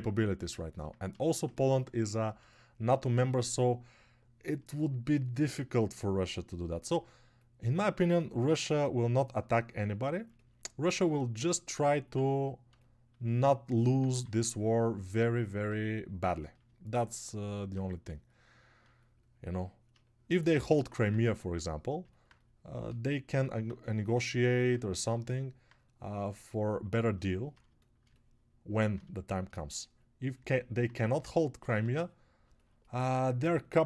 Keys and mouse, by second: 28.1 alt+click, 28.1 alt+middle click, 28.1 alt+right click.